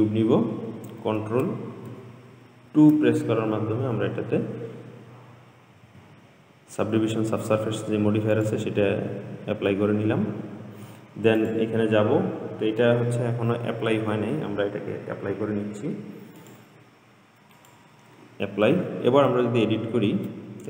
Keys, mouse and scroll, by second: 2.9 ctrl+2, 6.1 g, 9.1-9.8 scroll up 6, 9.8-10.7 scroll down 2, 11.6 click, 16.6-19.6 drag, 19.6 Tab, 20.2-20.6 scroll up 3.